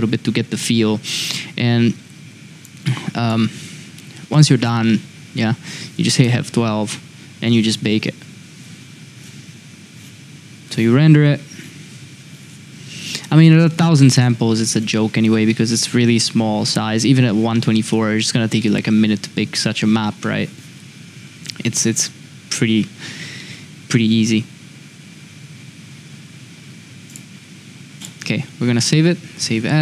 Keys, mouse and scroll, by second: 2.7 click, 4.3 click, 6.6 F12.